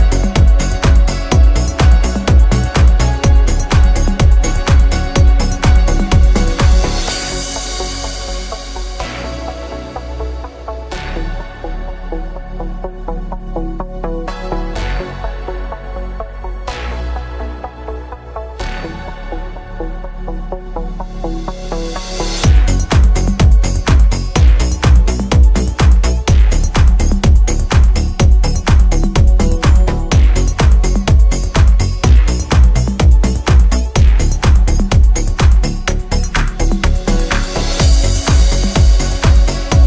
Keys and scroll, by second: 5.5 space, 8.5 m, 9.6 space, 9.9 e, 11.5 p, 13.4 e, 16.8 space, 19.2 g.